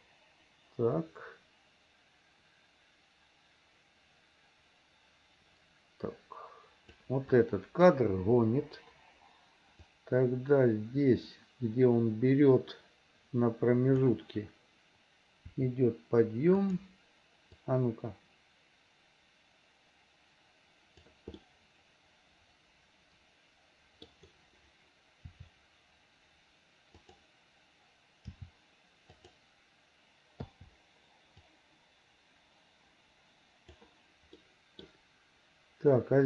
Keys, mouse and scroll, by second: 7.3 click, 8.5 Delete, 10.0-14.1 drag, 15.5 r, 17.7-21.2 drag, 21.4-24.1 middle drag, 25.3 r, 28.3 g, 30.5 i, 31.6-33.9 drag, 34.4 middle click.